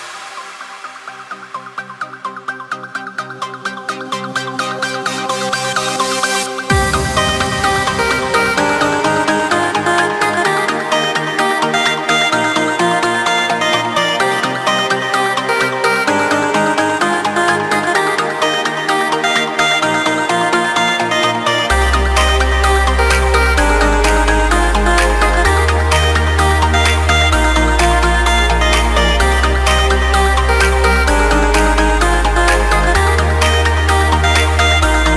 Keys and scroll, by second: 0.9 ctrl+space, 6.2 ctrl+z, 6.5 ctrl+space, 18.3 ctrl+space.